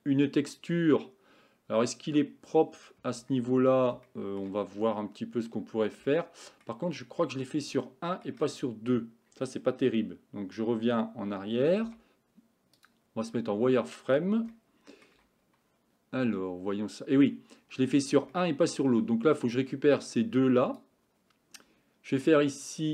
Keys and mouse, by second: 3.2 Tab, 4.1 shift+middle click, 6.1 shift+middle click, 7.0 shift+middle click, 7.8 shift+middle click, 11.9 z, 14.6 shift+middle click, 18.4 shift+middle click, 19.6-20.9 drag.